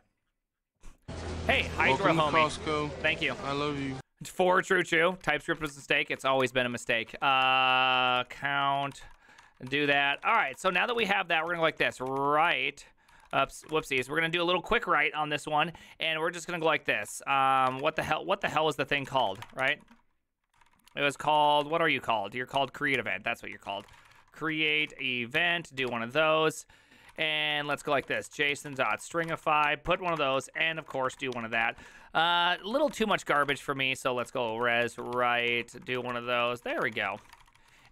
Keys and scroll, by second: 5.4-14.5 typing, 9.7 ctrl+c, 17.5-19.9 typing, 20.6 ctrl+d, 20.7 ctrl+d, 20.9 ctrl+d, 22.6 ctrl+t, 23.0 ctrl+h, 23.4-37.9 typing.